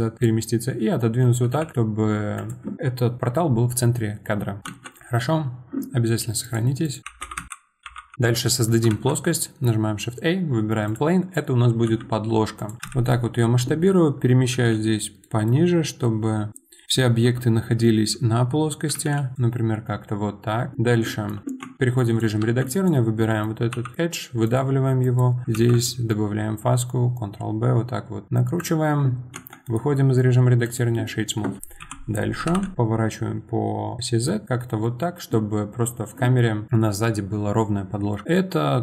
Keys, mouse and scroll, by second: 1.5 g, 4.6 click, 4.7 shift+a, 6.4 click, 6.8-8.1 drag, 8.1-8.9 middle drag, 8.9 shift+a, 10.9 shift+a, 11.8 s, 12.9 KP_1, 14.6 g, 21.6 Tab, 22.0 click, 22.4 2, 22.7 click, 23.2 middle click, 23.7 e, 25.2 click, 25.5 ctrl+b, 29.3 Tab, 29.6-31.0 right drag, 31.0-31.8 middle drag, 31.8 KP_7, 32.4 r, 34.8-38.8 middle drag.